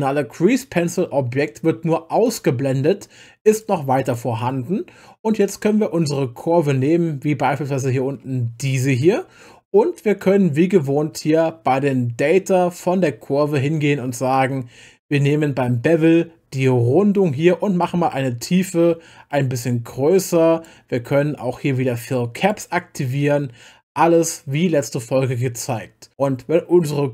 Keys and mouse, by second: 0.9 click, 2.2 click, 3.5 click, 4.0 click, 5.4 click, 17.8-20.8 drag, 22.4 click.